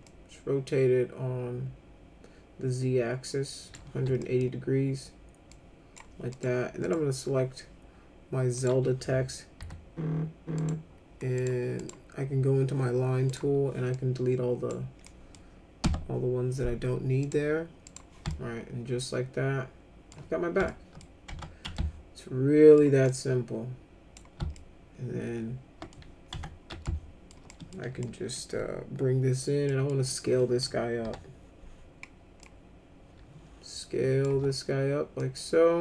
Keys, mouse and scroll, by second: 0.0-3.7 drag, 3.9 w, 4.2 middle click, 5.5 click, 6.3 click, 6.8 click, 8.5 click, 9.6 e, 10.5 click, 11.4 click, 11.8 click, 13.3 click, 13.9-14.7 drag, 15.0 middle drag, 15.8 Delete, 17.2 click, 17.9 click, 18.3-20.1 alt+middle drag, 20.7 alt+middle click, 21.3 F3, 21.8 alt+middle click, 23.1-24.1 drag, 24.5-25.9 alt+middle drag, 26.3 F3, 26.8 alt+middle click, 27.5 middle click, 28.0 middle click, 29.7 middle click, 31.0 r, 32.4-34.2 drag, 34.3 w, 35.2-35.8 drag.